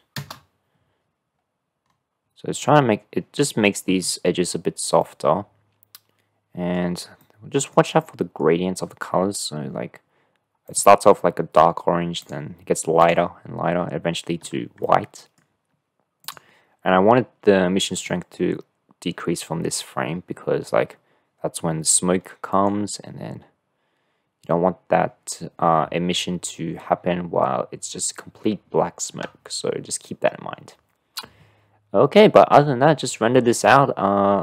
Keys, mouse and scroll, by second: 0.3 KP_0, 5.1-6.8 drag, 7.3 click, 8.1 click, 10.8 click, 12.7 click, 13.1 drag, 15.1-15.6 drag, 16.3 click, 20.0-21.3 drag, 24.4-25.8 drag.